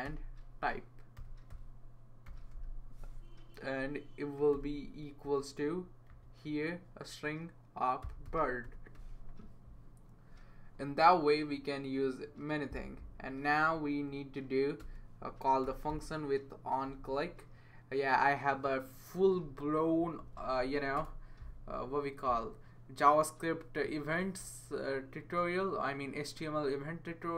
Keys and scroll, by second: 0.0-2.8 typing, 4.5 =, 6.1 ", 7.8-9.4 typing, 13.9 Left, 14.8-16.4 typing, 20.0 Down, 20.2 Down, 20.3 Down, 21.0 Return.